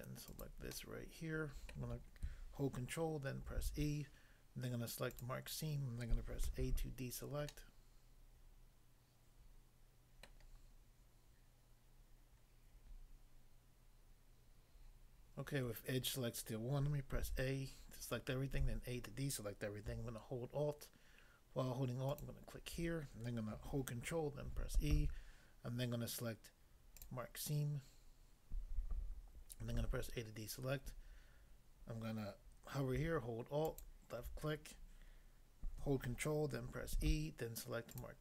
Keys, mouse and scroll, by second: 0.3 shift+click, 0.7 middle click, 1.7 middle click, 3.5 ctrl+e, 5.1 click, 6.5 a, 7.0 scroll down 1, 7.5 middle click, 10.2 middle click, 17.2 a, 22.1 alt+click, 24.5 ctrl+e, 26.9 click, 29.8 a, 33.7 alt+click, 36.9 ctrl+e, 37.9 click.